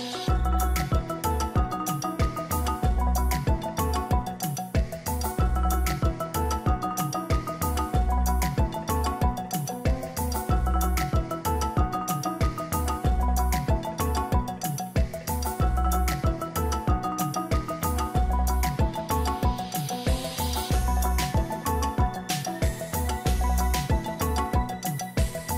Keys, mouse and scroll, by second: 6.4 double click, 14.2 right click, 18.1-19.6 typing.